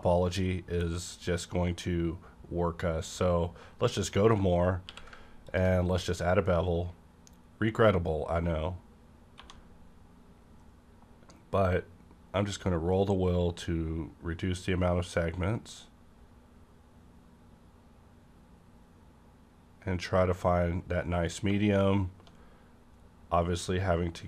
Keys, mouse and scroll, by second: 1.2 click, 3.4 click, 4.2 scroll down 1, 4.5 scroll up 1, 4.8 q, 5.4 click, 9.3 1, 9.4 click, 10.4-11.9 scroll down 1, 11.9-12.4 scroll down 1, 15.4-17.6 scroll down 1, 21.4-21.9 scroll down 1.